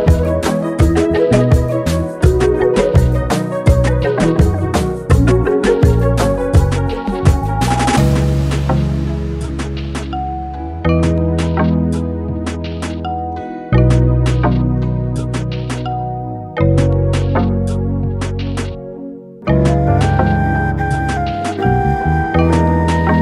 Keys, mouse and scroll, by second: 0.3 click, 0.7-1.9 middle drag, 1.9 Tab, 2.4 scroll down 1, 2.6-3.1 middle drag, 3.1 scroll up 1, 3.6 Tab, 4.5-6.1 middle drag, 6.2-6.9 scroll up 2, 6.9-8.2 shift+middle drag, 8.2 alt+click, 9.6 f, 13.0 Tab, 13.3 scroll down 2, 13.8-14.8 right drag, 14.8 scroll down 2, 15.3 click, 15.9-16.4 drag, 16.9-17.4 middle drag, 17.4 scroll up 2, 18.8-19.5 scroll down 1, 19.7 shift+a, 21.3 alt+middle drag, 22.3 shift+middle drag, 22.5 scroll down 2, 22.9-23.2 shift+middle drag.